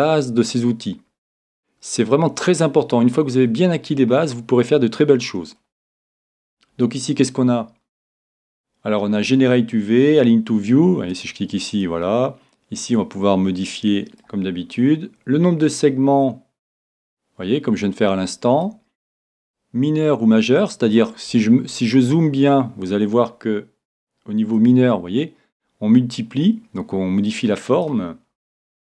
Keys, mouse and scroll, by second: 3.9-4.7 scroll down 1, 4.7-6.5 middle drag, 7.6-8.7 scroll up 1, 8.7-9.7 middle drag, 11.2-14.6 drag, 14.7-16.9 middle drag, 15.9-17.6 drag, 17.7 click, 19.5-21.5 drag, 21.6-24.4 middle drag, 24.6-26.4 drag, 28.3-28.9 middle drag.